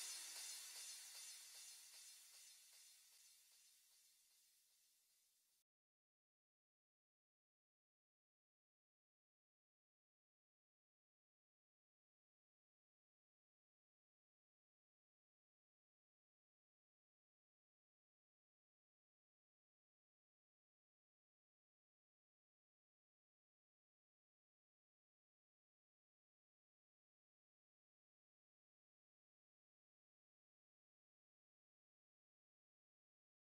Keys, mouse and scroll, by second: 11.7 F1, 12.3 F1, 21.7 F1.